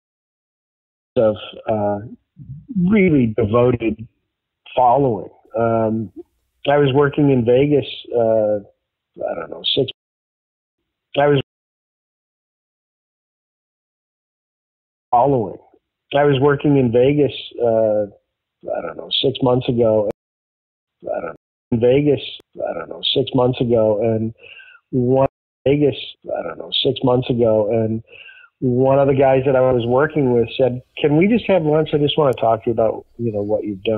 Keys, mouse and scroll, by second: 0.2 ctrl+z, 1.0 click, 1.0 space, 3.7-5.2 drag, 5.6 click, 6.6 click, 7.2 click, 8.3-9.8 drag, 9.8 space, 10.5 ctrl+shift+Delete, 10.7 space, 11.3 space, 11.5 click, 12.0 click, 12.8-14.2 drag, 14.4 click, 14.9 click, 15.0 space, 19.2 click, 20.0 space, 20.6 ctrl+shift+Delete, 20.8 space, 21.3 space, 21.5 click, 21.6 space, 23.3 click, 24.3 click, 25.2 space, 25.5 click, 25.6 space.